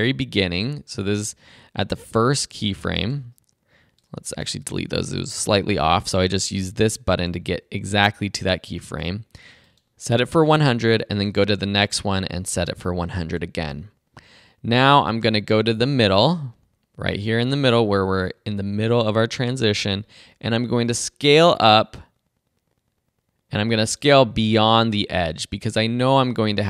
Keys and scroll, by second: 4.7 BackSpace.